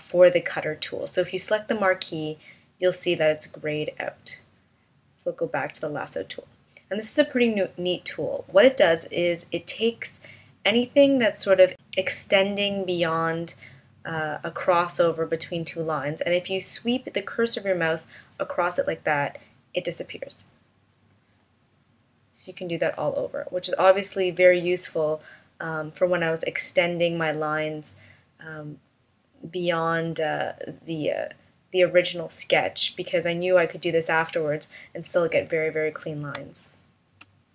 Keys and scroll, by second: 35.9 space.